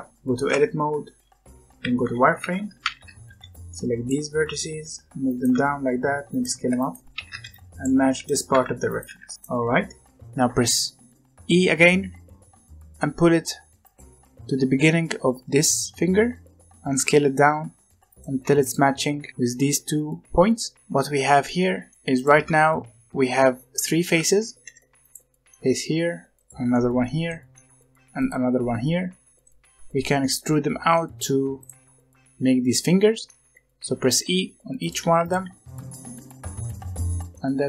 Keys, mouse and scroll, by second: 0.1 g, 0.4 Tab, 1.8 z, 2.7 alt+a, 3.2 b, 4.3 g, 5.4 s, 6.5-9.3 typing, 7.1 alt+a, 12.0 e, 16.8 s, 18.2 g, 19.1 g, 20.8 Tab, 21.1 z, 21.4-21.9 middle drag, 21.9 g, 22.1 click, 22.3 Tab, 23.2 scroll up 1, 23.5-24.5 middle drag, 24.5 3, 25.0 click, 25.4 middle click, 26.3 click, 26.6-28.1 middle drag, 28.1 click, 28.9-29.4 scroll down 1, 29.4-30.4 middle drag, 30.4-30.9 scroll up 1, 30.9 middle click, 31.5 click, 32.6 middle click, 33.4-34.0 scroll up 1, 34.0 e, 35.0 g, 35.4 r, 35.8 g, 36.6 middle click, 37.1 click, 37.3-37.6 middle drag.